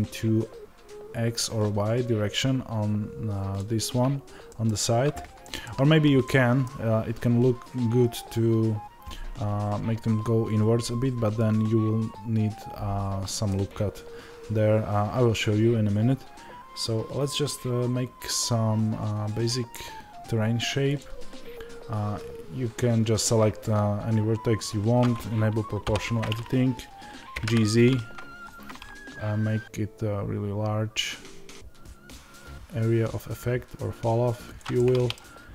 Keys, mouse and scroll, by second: 20.9 click, 25.7 o, 34.7-35.5 middle drag.